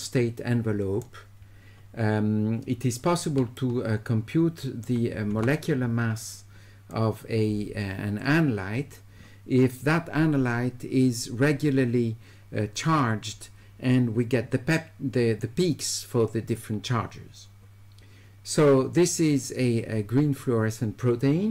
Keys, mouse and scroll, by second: 0.0 click, 0.1 right click, 0.3 click, 0.6 right click, 3.6 shift+right click, 6.9-8.2 drag.